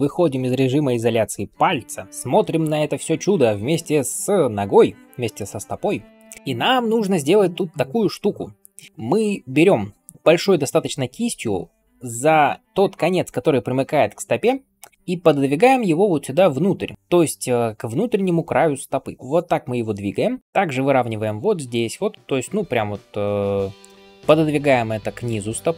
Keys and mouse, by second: 1.5 KP_Divide, 9.2 ], 9.3 ], 9.4 ].